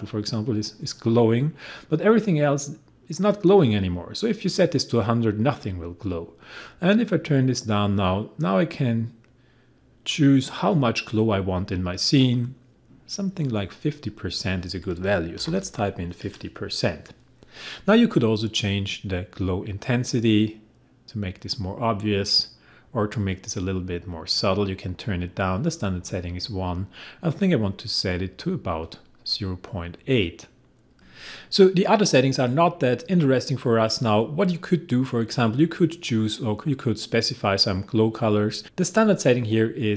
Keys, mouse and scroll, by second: 13.7 click, 15.2-16.0 typing, 19.8-29.8 drag.